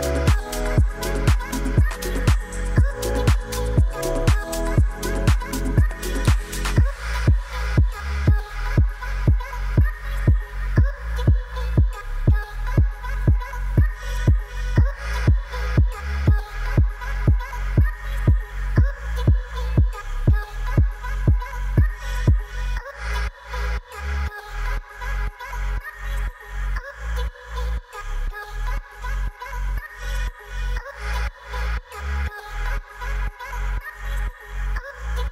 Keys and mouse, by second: 3.1 shift+d, 3.8 shift+z, 4.9 click, 6.1 drag, 8.3 ctrl+z, 9.2 g, 11.0 shift+d, 12.3 click, 12.6 g, 12.9 z, 13.2 click, 14.7 r, 14.9 r, 16.4 click, 17.0 KP_0, 19.0 r, 19.2 r, 20.5 click, 24.0 ctrl+s, 27.8 click, 28.7 click, 29.1-32.8 drag.